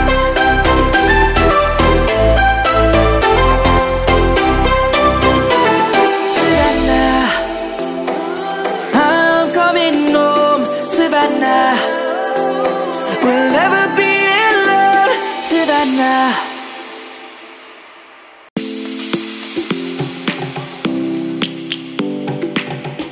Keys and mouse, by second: 0.5 click, 8.6 click, 11.6 middle click, 14.7 middle click, 15.8 click, 16.1 Tab, 17.0 middle click, 18.4 click, 19.3 Tab, 19.6 click, 21.0 Tab, 21.6 click.